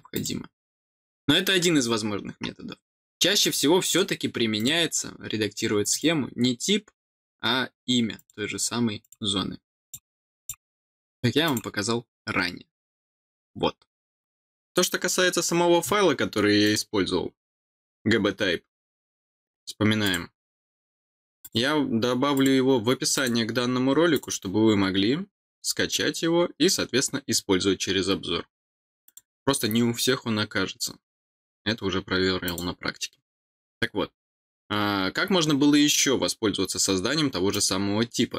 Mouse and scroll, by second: 0.1 click, 3.4 click, 3.8 click, 4.5 click, 5.8 click, 8.1 click, 8.9 click, 9.8 click, 10.3 click, 11.4 click, 16.6 click, 20.0 click, 21.4 click, 22.3 click, 23.1 click, 24.1 click, 29.0 click, 32.4 click, 37.5 click.